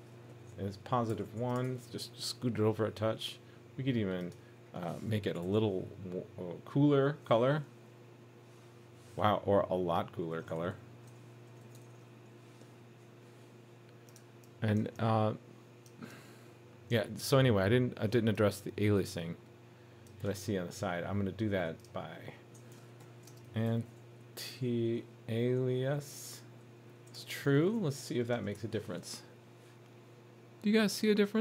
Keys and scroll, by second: 1.6 super+s, 7.3 super+s, 11.8 super+s, 28.6 super+s.